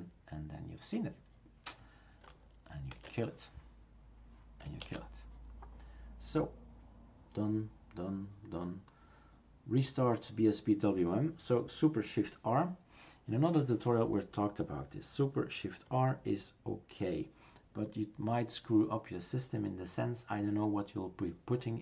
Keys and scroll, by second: 3.0 shift+super+q, 4.9 shift+super+q.